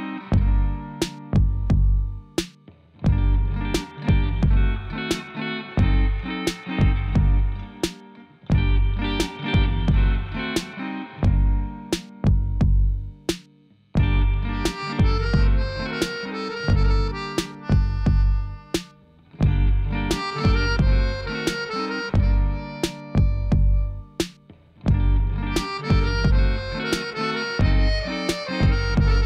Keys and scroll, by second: 5.9 Tab, 12.6 Tab, 19.6 ctrl+r, 23.8 ctrl+r, 25.7 3.